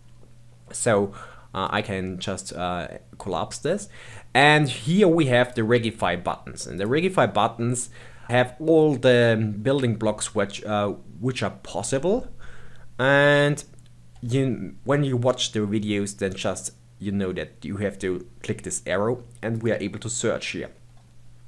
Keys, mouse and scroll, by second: 0.8-1.6 scroll up 2, 1.6-4.5 drag, 4.5-5.4 scroll down 2, 5.4-7.1 drag, 7.1-8.2 scroll down 10, 8.4-10.4 scroll up 11, 10.4-12.4 scroll down 7, 16.3 click, 19.5-21.4 drag.